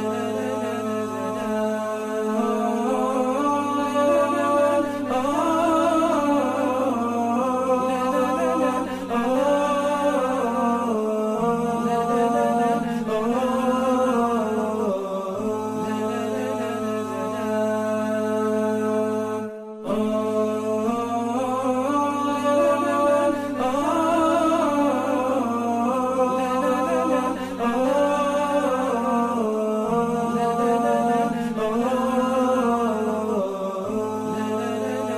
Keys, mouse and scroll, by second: 5.7 ctrl+0, 7.5 space, 8.9 alt+scroll down 1, 9.9 ctrl+c, 12.9 v, 14.5 alt+scroll down 1, 16.8 alt+scroll down 1, 17.5 alt+scroll up 1, 21.2 ctrl+2, 22.4 ctrl+z, 23.0 ctrl+2, 24.0 t, 25.2 alt+scroll up 1, 29.0 space, 30.2 space, 30.5 shift+BackSpace, 31.0 space, 33.0 BackSpace, 33.2 Return, 34.8 space.